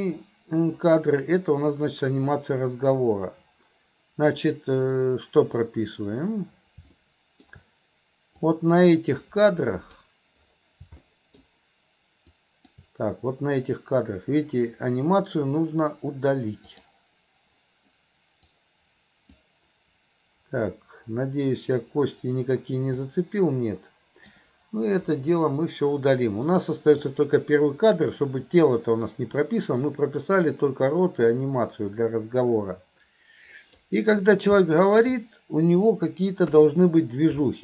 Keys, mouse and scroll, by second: 7.0-7.5 middle drag, 8.5-10.1 drag, 11.1-11.4 middle drag, 12.4-12.8 drag, 16.8 click, 18.5-19.5 drag, 23.0-24.4 drag, 26.6 click, 27.1-33.9 drag, 34.7-35.0 middle drag, 37.5 middle click.